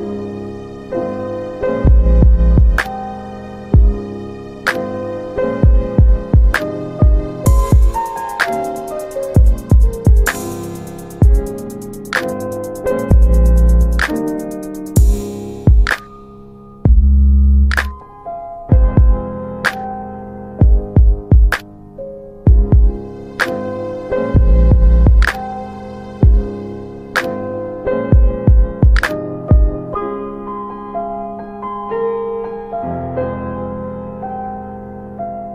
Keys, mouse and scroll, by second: 0.8-1.6 typing, 2.3 Tab, 3.3-4.1 typing, 4.6 Tab, 5.4-6.1 typing, 7.2 typing, 7.5 middle click, 8.0 alt+w, 8.5 alt+w, 9.0 typing, 10.2 alt+w, 10.9 alt+w, 11.5 z, 12.2 middle click, 12.3 scroll down 1, 12.4 middle click, 15.1 click, 23.2 click, 23.8 typing, 24.4 Return, 27.0-28.1 typing, 28.2 Return, 30.0 typing, 30.4 Return, 31.5 alt+middle click, 31.6 alt+w, 31.8 alt+w, 32.7 alt+middle click, 33.8 click, 34.7 alt+middle click.